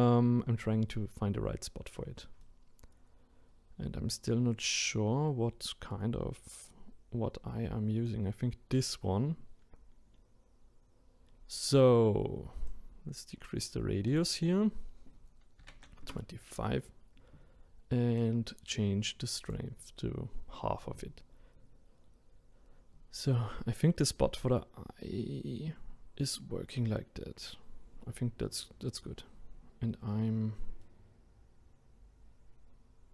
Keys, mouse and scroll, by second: 12.6-17.1 drag, 18.1-30.8 drag, 30.8-33.1 right drag.